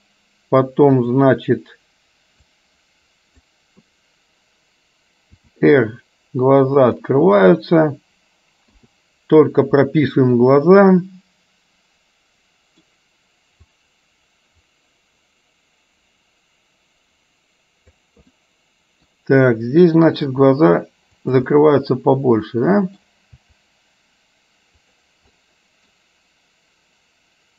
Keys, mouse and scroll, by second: 1.2 click, 2.6-3.7 drag, 5.5 r, 10.6-13.0 middle drag, 13.9-18.1 drag, 18.5 middle click, 20.4 r, 21.6-23.1 middle drag, 23.5 r, 25.5 middle click.